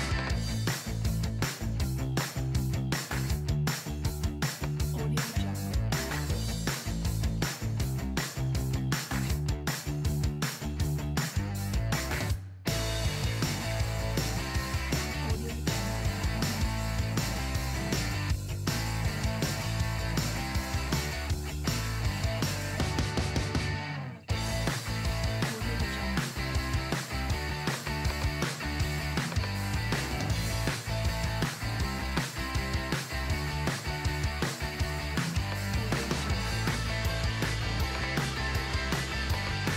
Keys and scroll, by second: 16.2 super+=, 16.2 super+space, 17.9 super+z, 22.5 space, 24.2 space, 25.5 space, 25.7 shift+z, 26.6 space, 27.7 shift+z.